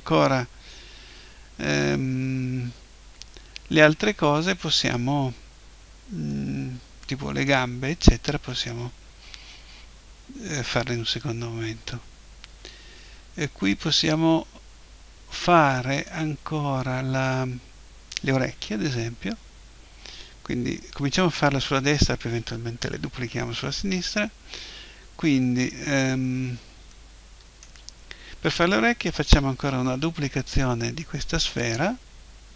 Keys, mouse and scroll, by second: 3.2-8.2 middle drag, 13.4-15.3 middle drag, 16.7-18.8 middle drag, 18.8 KP_1, 26.9-28.8 middle drag, 30.0 shift+d, 31.8-32.5 drag.